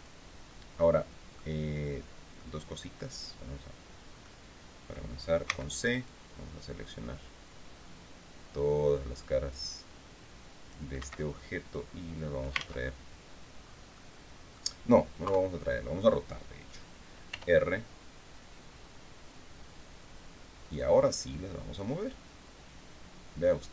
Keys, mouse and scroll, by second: 0.3 click, 1.8 click, 3.7 click, 4.9 c, 5.5-10.4 drag, 10.4 Escape, 11.2 click, 12.1 ctrl+z, 13.1 scroll down 2, 13.4 click, 14.7 KP_3, 16.8 r, 20.2 click, 21.2-23.4 drag.